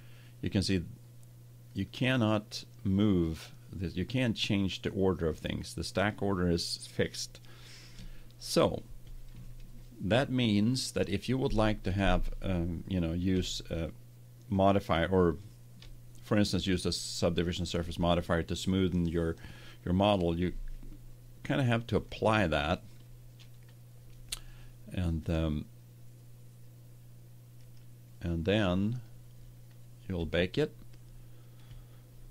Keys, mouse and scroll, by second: 1.6-3.3 drag, 4.0-7.7 drag, 13.3-15.3 middle drag, 21.9-23.8 drag, 25.0-27.1 middle drag, 27.5-28.9 right drag, 28.9 middle click, 29.4-32.0 drag.